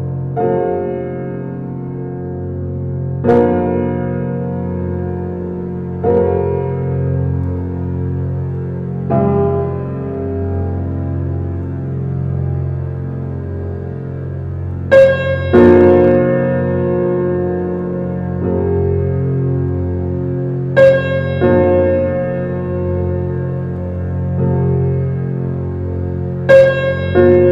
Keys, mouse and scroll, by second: 0.9 click, 2.1-3.3 drag, 3.3 middle drag, 3.6 click, 3.9-5.3 middle drag, 5.3 click, 10.4 shift+d, 12.9 s, 16.5 alt+middle click, 16.6 alt+middle click, 16.9-17.3 scroll up 4, 17.3 shift+middle drag, 17.5 scroll up 1, 17.8 shift+middle click, 18.4 g, 21.2 s, 22.3-22.7 middle drag, 22.7-23.1 scroll down 1, 23.1-24.7 middle drag, 25.1-25.8 shift+middle drag, 25.8 shift+d.